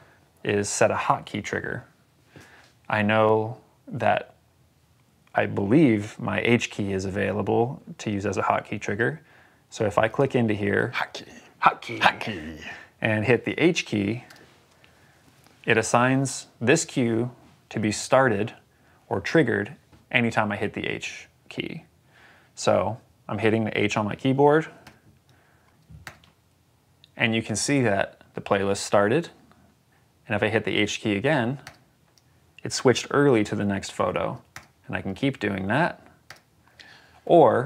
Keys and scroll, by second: 14.1 h, 25.9 h, 31.6 h, 34.4 h, 36.2 h.